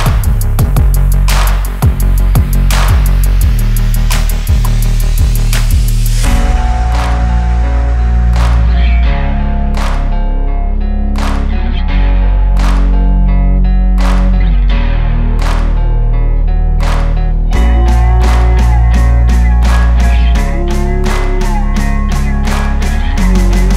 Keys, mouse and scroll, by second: 0.1 Return, 0.2-0.9 alt+scroll down 1, 3.5 ctrl+b, 5.2-12.6 drag, 22.8-23.7 drag.